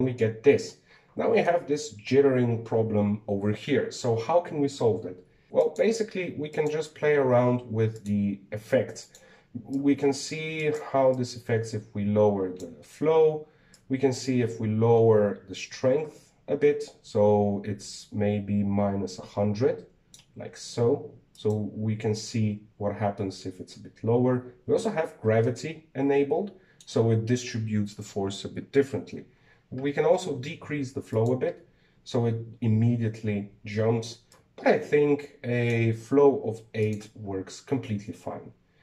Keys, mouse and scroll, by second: 0.0 click, 1.5-2.4 middle drag, 2.4-2.7 scroll up 4, 4.9 scroll down 2, 6.4 click, 7.3 click, 8.7 right click, 9.8 click, 10.5-11.5 drag, 11.9-17.6 drag, 22.1-25.2 drag, 25.4 z, 26.2-29.3 middle drag, 29.7-30.8 drag, 31.9-34.9 drag, 35.1-37.7 drag.